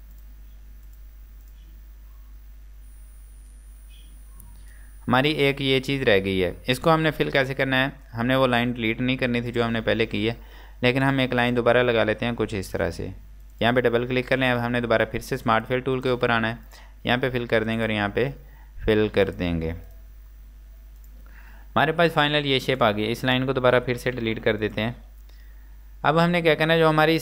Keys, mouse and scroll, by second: 0.2 click, 1.9 scroll down 1, 2.5-3.2 scroll up 1, 4.3 scroll down 1, 7.5-10.1 scroll down 1, 10.1 scroll up 1, 11.1 click, 18.2 scroll down 1, 19.3 click, 20.3-21.1 scroll down 1, 21.1 click, 24.3 z, 24.7 click, 25.5 Delete.